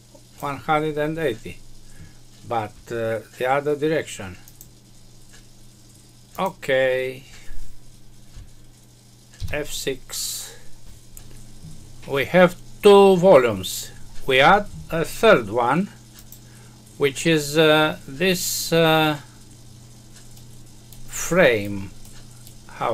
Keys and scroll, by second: 9.3 F6.